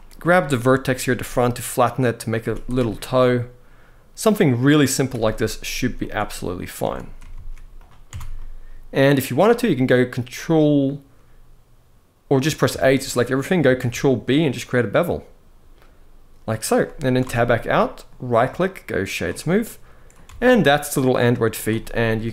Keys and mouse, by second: 0.0 click, 0.8 g, 1.9 click, 2.1 z, 2.7-4.9 middle drag, 5.7 middle click, 6.5 Tab, 7.0 ctrl+a, 7.8 Tab, 8.1 middle click, 10.1 middle click, 12.1 middle click, 12.4 a, 12.8 middle click, 13.5 ctrl+b, 16.9 Tab, 17.2-17.8 middle drag, 18.0-18.9 right drag, 19.3-19.9 middle drag, 20.1 alt+a, 20.2-20.7 middle drag, 21.5 middle drag, 21.9 s.